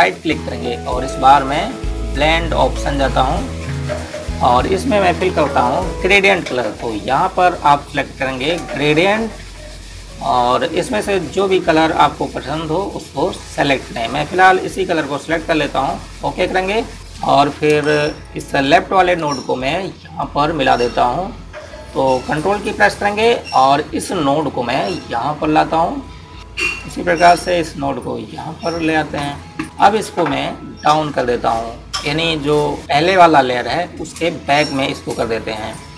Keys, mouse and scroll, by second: 0.7 right click, 3.7 click, 9.5 click, 16.3 click, 18.1 ctrl+=, 18.4-19.2 typing, 19.1 click, 20.2 click, 25.3 click, 29.3 click, 30.6 click.